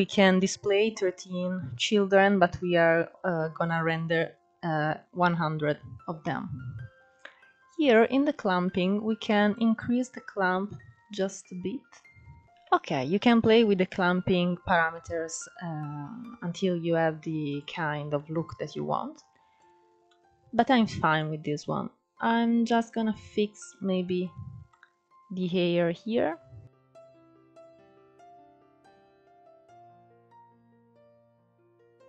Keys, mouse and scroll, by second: 5.9-8.3 scroll down 4, 8.3-11.4 drag, 12.3 scroll up 3, 16.1 scroll up 2, 17.1 click, 17.8-19.2 middle drag, 19.2 click, 19.7-20.4 middle drag, 20.4 click, 20.8-23.3 middle drag, 23.3-23.8 scroll up 1, 23.8 click, 24.3-26.3 middle drag, 26.3 click, 27.2 middle click, 27.8 click, 28.2 middle click, 28.5 scroll up 4, 28.6 middle click, 28.9 click, 29.0 scroll down 5, 29.1 middle click, 29.5-30.8 drag, 30.8 scroll down 1, 30.8-31.4 middle drag, 31.4 scroll up 3, 31.5-32.0 middle drag.